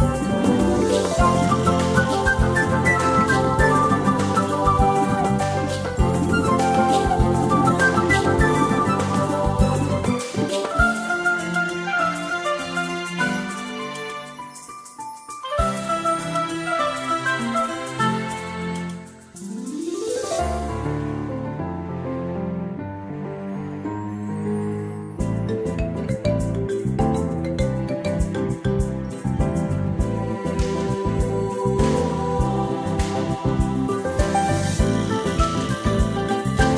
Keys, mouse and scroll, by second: 1.7 click, 9.5 ctrl+scroll down 2, 11.8 click, 15.6 space, 18.3-18.6 ctrl+scroll up 1, 19.9 click, 24.2 click.